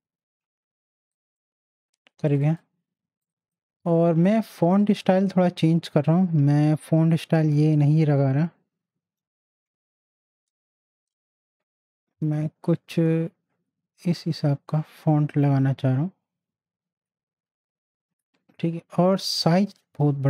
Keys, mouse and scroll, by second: 9.0-10.1 typing, 9.2 click, 11.1 Down, 13.7 Down, 14.3 Down, 16.5 Up, 18.1 Return.